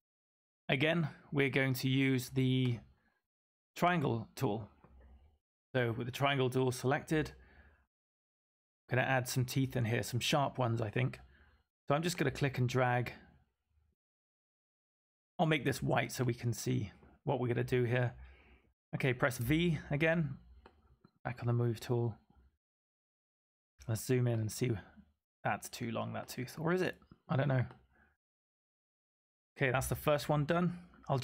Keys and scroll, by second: 19.3 v.